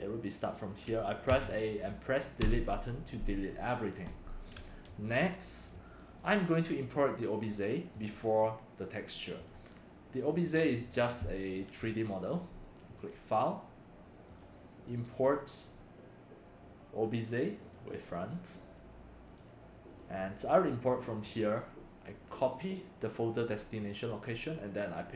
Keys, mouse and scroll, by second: 1.3 a, 2.4 Delete, 5.6 click, 7.9 click, 8.1 click, 9.4 click, 9.6 BackSpace, 10.3 click, 11.7 click, 12.2-12.5 drag, 13.0 click, 13.7 middle click, 14.3 click, 15.1 click, 16.2-17.2 scroll up 3, 17.6 click, 18.4 click, 19.2 click, 21.2 click, 21.9 click, 22.1 ctrl+c, 23.7 click, 24.9 click.